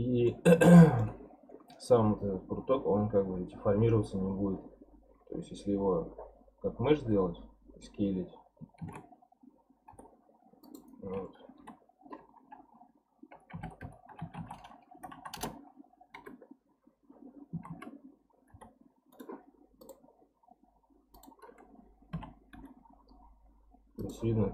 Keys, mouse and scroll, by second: 1.2-2.7 scroll up 10, 2.7-4.5 scroll up 1, 5.2-6.1 scroll down 1, 6.1 scroll down 3, 7.0-8.2 scroll down 9, 8.2-8.8 scroll down 5, 8.8 shift+d, 11.6 F3, 15.1 Down, 16.2 KP_Decimal, 16.9-17.2 scroll up 4, 17.5 s, 19.8-22.1 drag, 22.1 s, 24.3 scroll up 2.